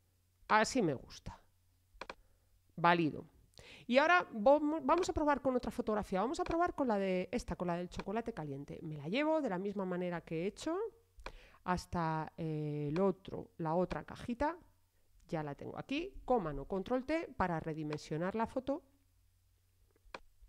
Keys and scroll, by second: 16.1 super+t.